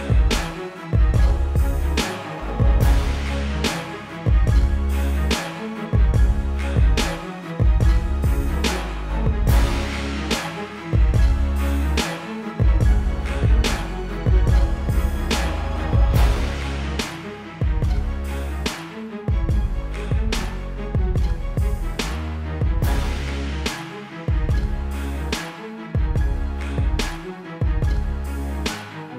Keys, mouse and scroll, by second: 5.9 click, 12.3 ctrl+KP_0, 12.9 click, 13.6 right click, 15.3 click, 22.4 click, 28.1 click.